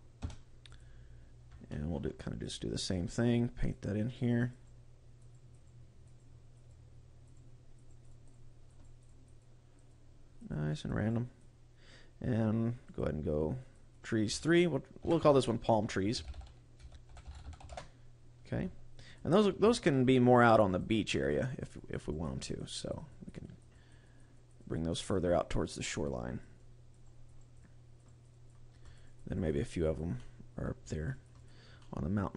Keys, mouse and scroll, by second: 1.4 shift+scroll down 1, 1.6 shift+middle click, 2.1 click, 2.5 click, 2.9 click, 3.1 click, 3.7 click, 4.2 click, 4.5 click, 5.2 click, 5.5 click, 6.2 click, 6.7 click, 7.3 click, 7.7 click, 8.0 click, 8.2 click, 8.8 click, 9.0 click, 9.4 click, 9.8 click, 10.3 click, 10.9 click, 12.9 click, 13.5 click, 13.8 click, 18.9 click, 19.3 scroll down 2, 19.5 shift+middle click, 20.0 click, 20.3 click, 20.7 click, 20.8 click, 21.1 click, 21.3 click, 21.7 click, 22.0 click, 22.3 click, 22.7 click, 23.0 click, 23.4 click, 23.7 click, 24.1 click, 24.3 click, 24.5 click, 24.9 click, 25.3 click, 25.7 click, 26.1 click, 26.5 click, 26.9 click, 27.3 click, 27.5 click, 27.9 click, 28.2 click, 28.7 click, 28.9 click, 29.4 click, 29.8 click, 30.0 middle click, 30.7 scroll up 2, 31.0 click, 31.4 click, 31.7 middle click.